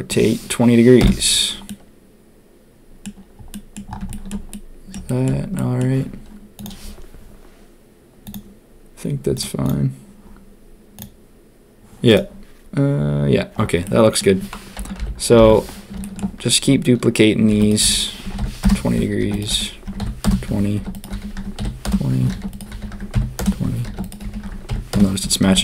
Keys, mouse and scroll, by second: 1.6-3.0 drag, 3.5 middle click, 4.1 shift+middle click, 4.5 middle click, 5.0 shift+middle click, 5.5 middle click, 13.8 middle click, 14.9 KP_1, 16.0 shift+click, 17.4 shift+d, 17.8 r, 19.1 shift+d, 19.4 r, 20.7 shift+d, 21.1 r, 22.3 shift+d, 22.6 r, 23.8 shift+d, 24.2 r, 25.4 shift+d.